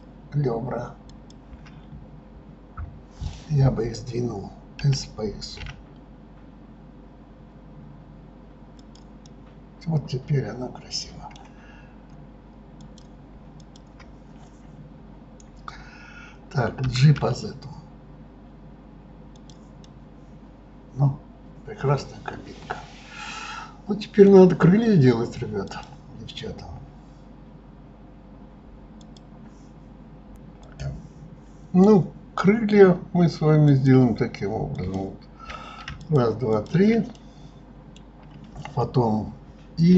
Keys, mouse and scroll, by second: 1.1 shift+click, 9.2-12.2 middle drag, 12.8 click, 13.6 shift+click, 19.8-22.9 middle drag, 25.6 click, 33.4 click, 34.5 click, 35.7 shift+click, 36.3 shift+click, 36.9-39.7 middle drag, 39.7 i.